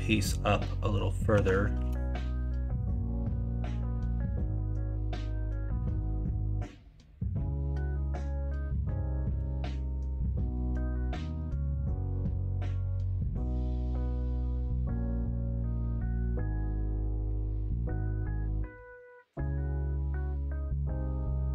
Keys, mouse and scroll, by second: 1.3 s.